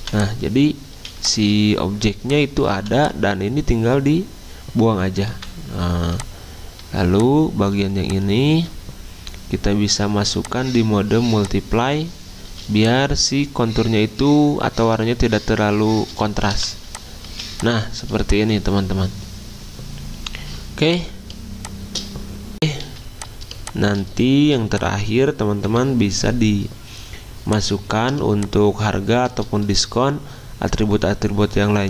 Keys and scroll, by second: 2.1 z, 3.1 v, 5.3 Delete, 12.5 z, 16.5 v, 17.3 z, 22.9 z, 24.5 v, 25.7 Delete.